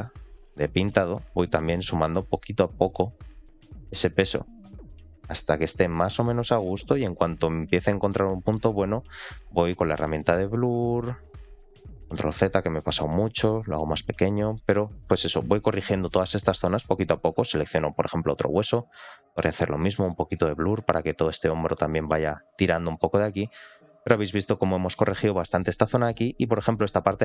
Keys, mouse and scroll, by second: 1.1 click, 2.1 click, 2.4 click, 2.7 click, 2.9 click, 3.2 click, 3.5 middle click, 4.1 click, 4.4 click, 4.6 click, 4.8 click, 5.1 click, 5.3 click, 5.5 click, 5.7 middle click, 6.2 click, 6.4 click, 6.7 click, 7.1 middle click, 7.6 click, 8.8 click, 9.0-9.6 scroll down 2, 9.6 click, 9.9 click, 10.3 middle click, 10.8 ctrl+z, 11.2 ctrl+z, 12.1 f, 13.1 click, 13.3 click, 13.5 click, 13.7 click, 13.9 click, 14.2 click, 14.4 click, 14.5 click, 14.8 click, 15.0 click, 15.2 click, 15.4 click, 15.6 click, 15.8 click, 16.0 click, 16.3 middle click, 16.9-17.3 scroll down 1, 17.8 ctrl+click, 18.2-18.6 scroll up 1, 18.6 click, 18.8 click, 19.1 click, 19.3 click, 19.5 click, 19.7 click, 19.9 middle click, 20.4 click, 20.7 click, 20.9 click, 21.1 click, 21.3 click, 21.5 click, 21.7 click, 21.9 click, 22.1 click, 22.3 click, 22.5 click, 22.7 click, 22.9 middle click, 23.2-23.7 scroll down 1, 23.7 middle click, 24.2-24.5 scroll down 2, 24.5 middle click, 25.0 shift+middle click, 25.4 middle click, 25.8 shift+middle click, 26.3-26.7 scroll up 1, 26.7 middle click.